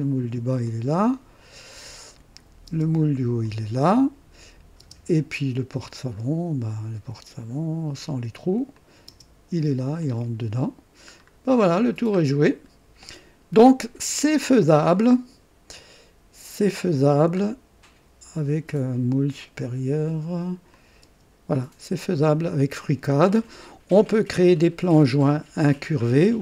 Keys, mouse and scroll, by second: 0.6-2.6 drag, 2.6 space, 2.7 space, 3.4-4.2 drag, 4.8 space, 5.9 scroll down 1, 6.1-6.5 scroll up 1, 7.5 scroll up 1, 8.7 click, 9.1 space, 10.0 click, 11.1-11.4 scroll down 1, 11.9 scroll down 1, 12.6-12.9 scroll down 1, 17.4 scroll up 1, 20.7 click, 21.0 space, 22.0 click, 22.7-23.6 drag, 24.4 click.